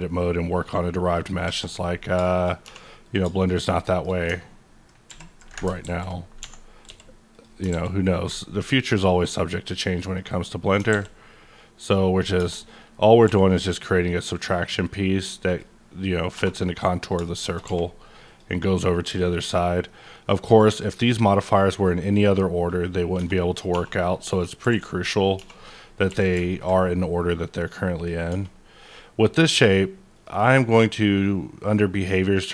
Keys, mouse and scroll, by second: 1.0 click, 1.4 KP_Enter, 2.0 scroll down 3, 2.3 middle click, 2.5 scroll up 2, 2.6 3, 3.0 click, 3.8 shift+middle click, 5.0 ctrl+i, 5.8 alt+x, 6.6 scroll down 2, 6.8 x, 7.3 click, 7.7 alt+x, 8.4-9.4 scroll down 2, 10.0 click, 10.9 alt+x, 11.8 click, 12.2 scroll up 1, 12.3 Tab, 12.5 middle click, 12.8 scroll down 1, 15.3 q, 15.4 click, 16.3 2, 17.0 click, 17.4 shift+click, 17.6 q, 18.6 middle click, 19.5-20.2 alt+scroll down 2, 19.8-22.7 middle drag, 22.7 click, 23.2 Tab, 23.6 2, 23.8-24.2 scroll down 1, 24.2 click, 24.6 q, 25.4 q, 25.6 click, 26.1 q, 26.5 ctrl+click, 28.3 Tab, 30.1 click.